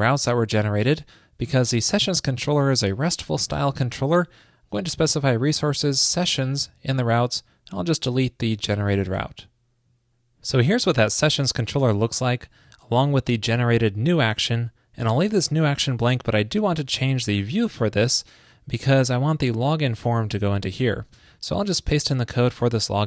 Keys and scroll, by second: 3.5 ctrl+shift+d, 9.3 super+s, 17.1 alt+super+Down, 20.9 super+a, 21.8 super+v.